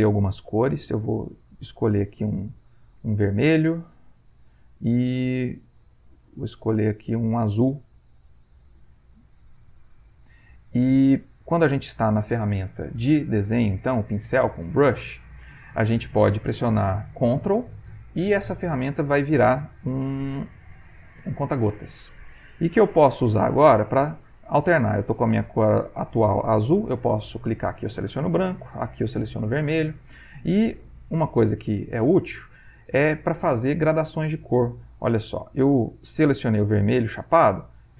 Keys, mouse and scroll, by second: 1.0 click, 1.8 click, 3.0-4.5 drag, 5.9-7.7 drag, 8.3-12.1 drag, 14.2-16.5 middle drag, 31.6-34.6 shift+drag.